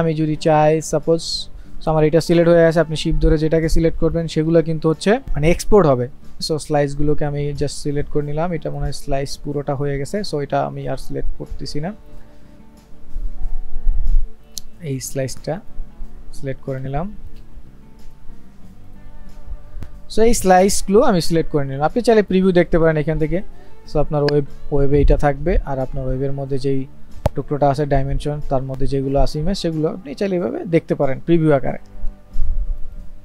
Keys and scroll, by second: 5.2 ctrl+z.